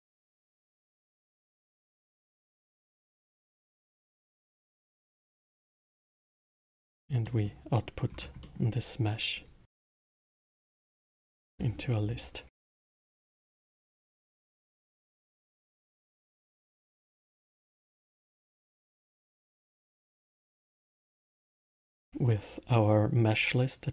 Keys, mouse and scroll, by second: 1.1-4.2 middle drag, 6.4 middle click, 6.8 scroll down 4, 7.2-8.1 middle drag, 8.1 scroll up 2, 8.4-9.3 middle drag, 9.3-12.4 drag, 13.3-14.5 middle drag, 14.5-16.3 drag, 18.0-18.5 middle drag, 18.5 scroll down 4, 18.9-20.3 middle drag, 20.3-21.4 scroll up 8, 21.4-21.8 middle drag, 21.8 shift+a.